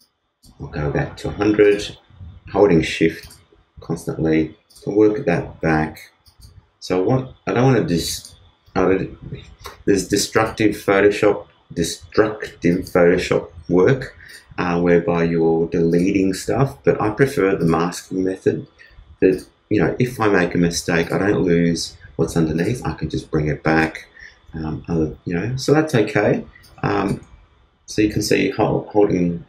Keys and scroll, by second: 26.2 super+space.